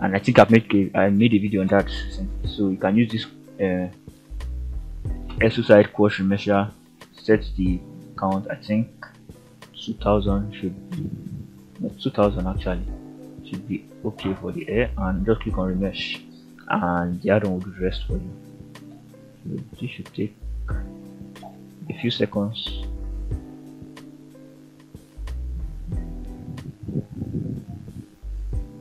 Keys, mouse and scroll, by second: 1.0 click, 5.0-9.0 drag, 9.8-11.7 drag, 10.9 0, 12.5-28.8 drag.